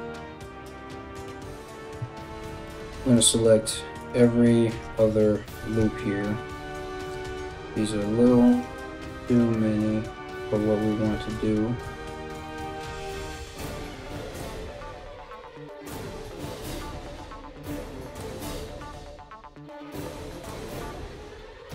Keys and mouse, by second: 1.8 alt+shift+right click, 2.0-3.6 alt+shift+middle drag, 3.6 alt+shift+right click, 3.6-21.7 alt+shift+middle drag, 4.3 alt+shift+right click, 5.2 alt+shift+right click, 8.1 alt+shift+right click, 8.8 alt+shift+right click, 9.5 alt+shift+right click, 10.5 alt+shift+right click, 12.1 alt+shift+right click, 12.7 alt+shift+right click, 13.5 alt+shift+right click, 14.9 alt+shift+right click, 15.5 ctrl+z, 15.9 alt+shift+right click, 17.5 right click, 19.3 alt+shift+right click.